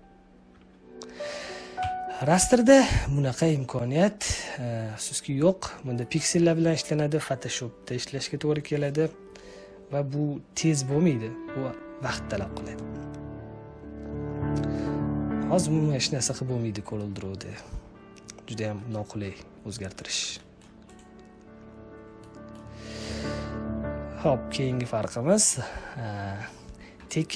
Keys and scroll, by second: 0.4 space, 1.7 Delete, 19.6 ctrl+z.